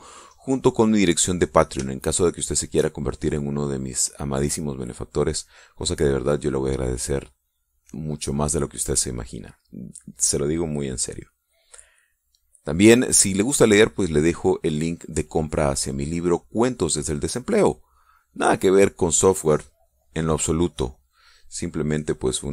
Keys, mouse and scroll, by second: 0.8 click, 1.8 click, 3.0-4.0 shift+drag, 4.2 shift+click, 5.0 shift+click, 5.3 shift+click, 9.0 click, 10.2 click, 11.0 click, 12.1-13.6 drag, 14.0 middle click, 15.0 click, 15.3 click, 15.9 middle click, 17.6 click, 18.5 click, 18.8 click, 19.1 click, 20.1-22.3 drag.